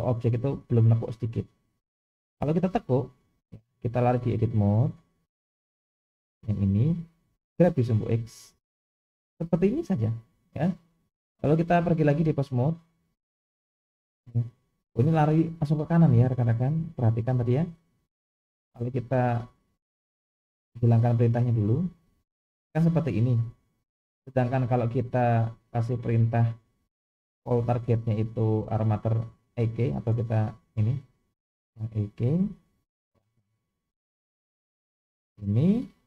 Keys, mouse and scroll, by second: 2.1 KP_1, 4.2-4.9 drag, 6.4 click, 11.6-12.5 drag, 14.2 click, 17.5 click, 22.2 click, 25.4 click, 27.3-33.6 drag, 34.2 click.